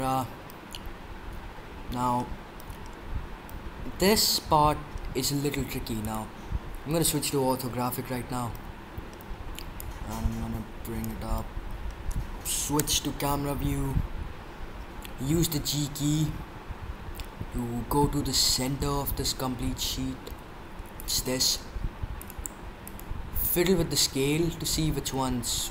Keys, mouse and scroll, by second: 0.6-5.4 middle drag, 8.5-9.7 middle drag, 12.7 KP_0, 16.1 g, 22.1-25.7 drag.